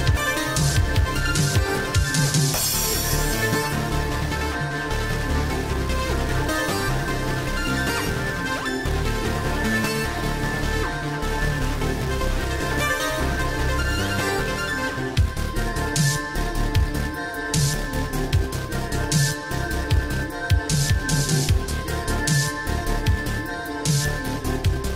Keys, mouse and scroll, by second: 9.4-9.9 typing, 10.3 Return, 12.2 click, 15.2-16.4 typing, 17.9 Return, 20.6 click, 24.7 right click.